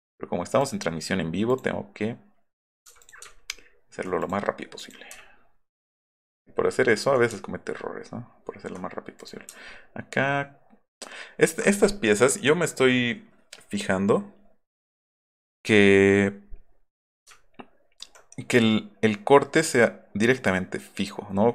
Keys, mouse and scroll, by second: 0.6 click, 1.5 click, 2.6 click, 3.0 click, 3.3 alt+middle click, 3.5 alt+middle click, 4.2 click, 4.8 click, 5.9 alt+middle drag, 6.4 alt+middle click, 6.8 alt+middle click, 7.4 alt+middle click, 8.1 alt+middle click, 8.3 alt+middle click, 9.1 click, 9.7 alt+middle drag, 10.2 alt+middle click, 17.4-18.0 alt+scroll up 4.